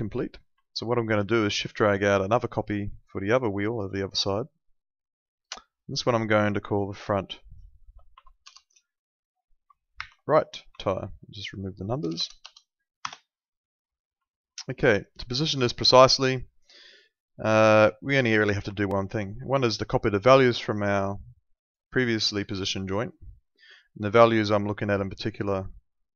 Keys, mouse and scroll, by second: 2.0 shift+click, 6.0 click, 8.4 BackSpace, 10.0 shift+r, 10.7 Right, 12.0 BackSpace, 13.0 Return, 14.2 alt+middle click, 15.2 alt+middle click, 17.7 alt+middle click, 19.4 alt+middle click, 21.5 click.